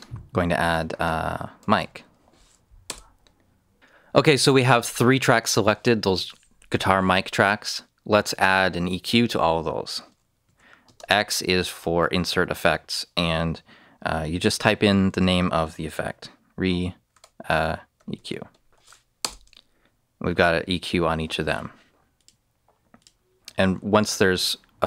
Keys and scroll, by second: 1.3-2.2 typing, 2.8 Return, 10.4 x, 10.8 space, 14.2-15.0 typing, 17.0-18.5 typing, 19.1 Return.